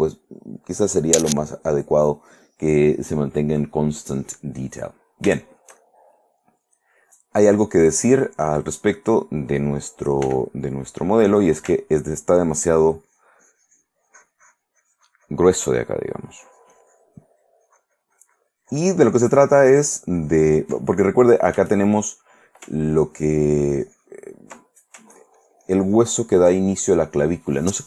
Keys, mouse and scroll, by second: 0.0 middle click, 4.5 middle click, 5.6-7.7 shift+middle drag, 8.1-9.7 middle drag, 9.8 middle click, 10.4 f, 11.1 click, 12.9-20.9 ctrl+drag, 21.0 ctrl+middle click, 22.2 shift+middle click, 22.9-24.5 ctrl+drag, 24.8 ctrl+middle click, 26.8 ctrl+click.